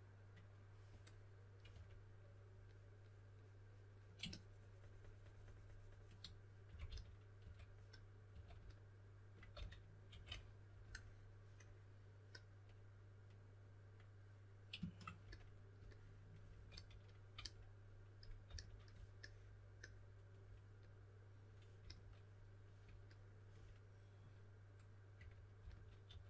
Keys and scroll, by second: 1.4-2.2 typing, 6.4-8.3 typing, 9.5-10.5 typing, 16.6 s, 18.4 s, 21.8 s, 24.9-26.2 typing.